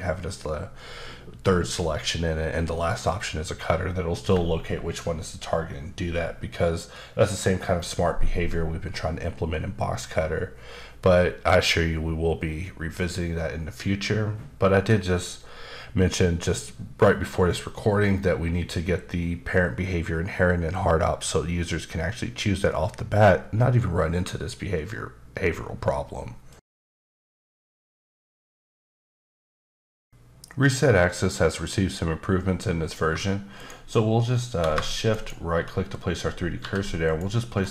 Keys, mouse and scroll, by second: 35.1 shift+right click, 36.6 g, 37.0 click, 37.5-37.7 scroll down 1.